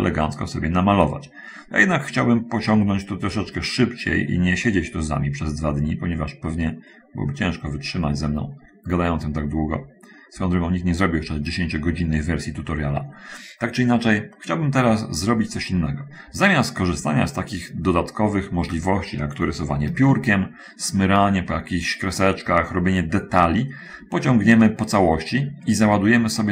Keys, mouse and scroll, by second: 2.5-6.9 drag, 7.2-13.6 drag, 13.6 middle click, 13.6-14.3 scroll up 1, 14.4 middle click, 14.4 scroll up 1, 17.7 middle click, 17.7-18.1 scroll up 1, 20.5 shift+middle click, 24.1-24.5 scroll down 2, 24.9 shift+middle click.